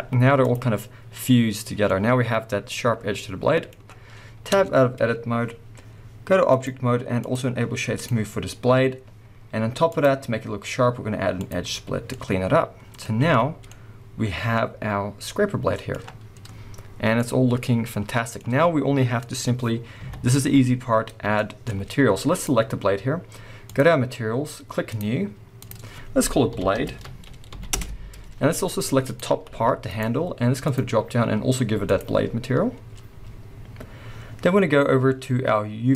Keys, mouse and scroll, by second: 0.0-6.5 middle drag, 0.0 z, 1.7 scroll down 2, 4.5 Tab, 6.5 click, 7.2-12.1 drag, 11.8 scroll down 2, 12.1-22.3 middle drag, 13.0 scroll up 1, 13.2 alt+a, 15.9-17.1 scroll down 1, 20.0 KP_1, 20.9-22.3 scroll up 5, 22.3 click, 24.9-29.2 drag, 27.7 Return, 29.5 g, 30.0 right click, 30.6-35.9 drag.